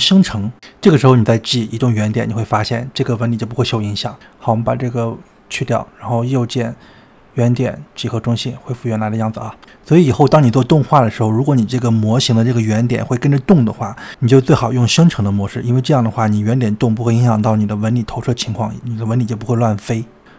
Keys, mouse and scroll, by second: 1.4 g, 4.1-6.5 drag, 6.7-8.6 right drag, 8.6-12.4 middle drag.